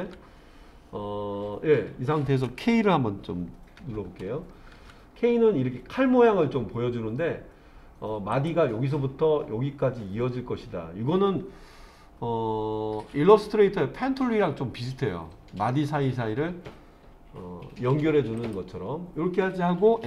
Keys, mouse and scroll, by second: 3.8 k.